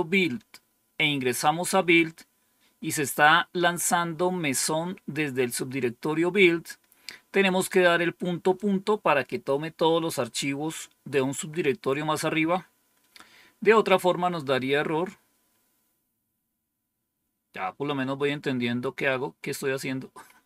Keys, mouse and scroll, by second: 7.2-8.1 scroll down 1, 16.1-17.6 scroll down 1, 17.9-19.2 scroll down 1, 19.2-19.8 scroll down 1, 19.8 scroll down 1.